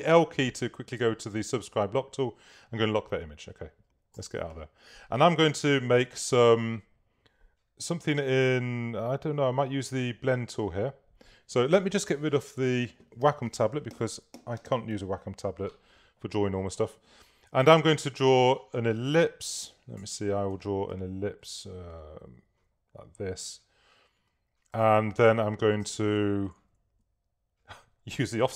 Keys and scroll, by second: 4.3 v, 5.6 super+-, 17.8 s, 20.6 5, 20.9 3, 21.5 2, 22.4 4, 25.9 shift+v.